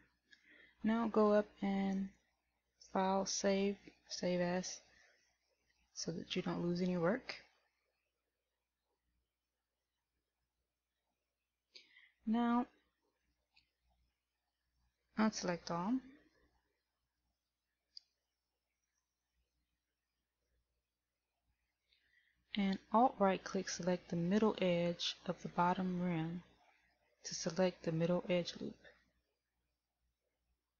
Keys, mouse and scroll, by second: 2.1 click, 19.0 middle click, 20.1 a.